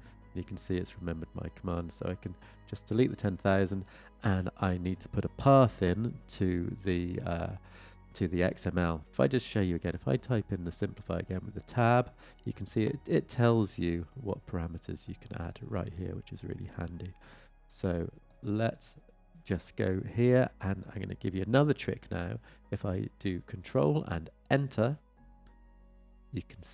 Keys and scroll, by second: 11.2 Tab, 25.2 ctrl+Return.